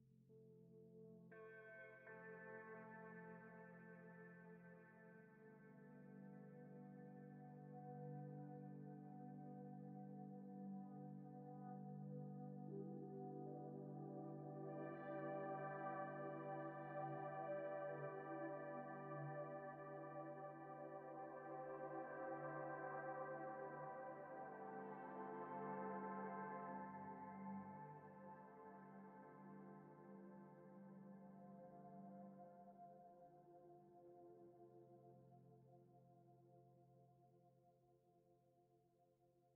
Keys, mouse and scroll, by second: 2.5-3.0 scroll down 1, 3.0-3.4 scroll up 1, 6.1-6.5 scroll down 1, 6.5 right click, 7.6 Escape, 7.8-9.1 scroll down 1, 9.1-9.7 scroll up 1, 9.7 right click, 10.2 scroll down 1, 12.1 typing, 13.1 shift+middle click, 13.4 scroll up 1, 13.7 shift+middle click, 14.0 scroll up 1, 14.2-15.2 scroll down 1, 15.4 shift+middle click, 15.6 scroll up 1, 15.9 shift+middle click, 17.9-18.3 scroll up 1, 18.3 scroll down 1, 18.7 shift+middle click, 19.5 scroll down 1, 19.8 scroll up 1, 20.9 shift+middle click, 25.5 right click, 27.5 Escape, 29.3 Escape, 32.8 Return, 33.3 typing, 35.7 Return, 36.8 typing, 38.0 Return, 38.4 typing.